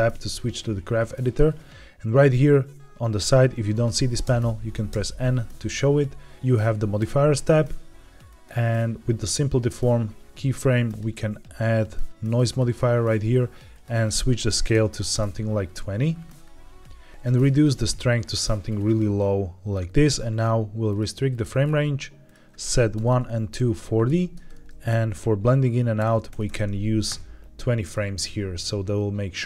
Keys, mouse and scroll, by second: 4.1 n, 4.8 n, 6.9 click, 8.2 click, 10.8-12.5 drag, 13.7-15.0 drag, 17.0 scroll down 1, 17.1 ctrl+z, 17.5-19.7 shift+drag, 20.8 click, 21.2-21.5 drag, 21.5-22.0 scroll down 2, 22.1-27.4 drag.